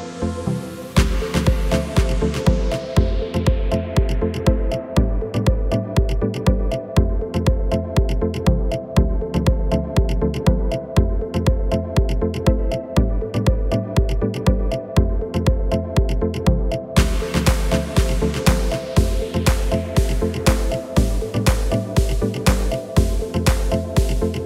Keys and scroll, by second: 10.3 s, 13.8 g, 13.9 y, 19.4 g, 23.7 Tab.